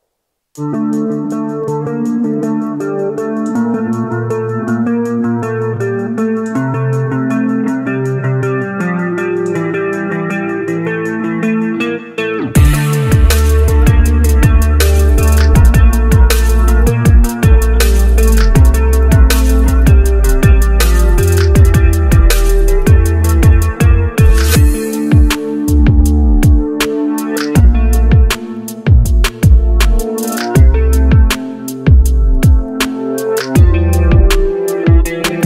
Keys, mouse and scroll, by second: 17.0-17.6 scroll down 1.